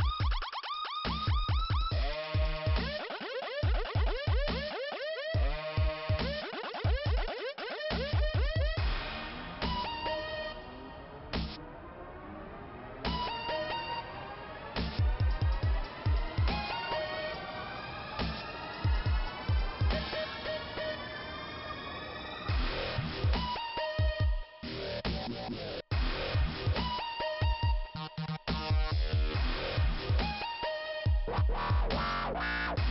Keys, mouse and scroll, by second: 0.3 click, 0.4 click, 1.1 Delete, 4.7 click, 6.5-7.2 scroll up 2, 7.8 click, 8.0 click, 12.3 m, 13.8 click, 14.3 m, 14.9 scroll up 1, 16.3 click, 17.3 click, 20.2 scroll down 2, 22.8 click, 24.4 click, 25.1 scroll up 2, 26.2 click, 28.0-29.1 scroll down 1, 30.1-31.2 scroll up 1, 32.1-32.9 scroll down 1.